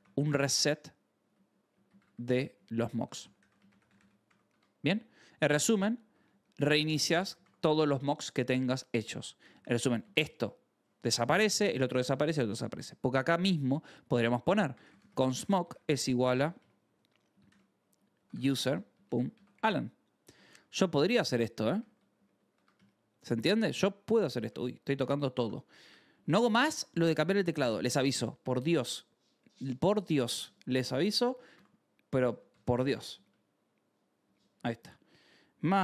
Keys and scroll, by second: 0.0-6.8 typing, 7.0 Escape, 7.3 ctrl+s, 9.3 j, 10.0 shift+v, 11.2 Escape, 12.1-24.3 typing, 20.5 Escape, 23.9 Escape, 25.3 Escape, 26.0-28.3 typing, 26.6 Escape, 29.8-35.8 typing, 33.0 Return.